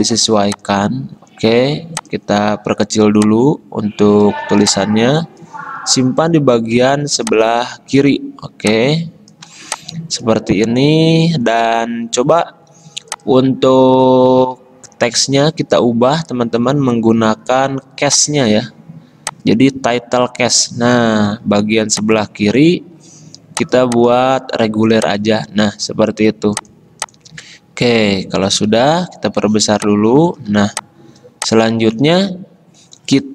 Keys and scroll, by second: 21.4 t, 28.7 v.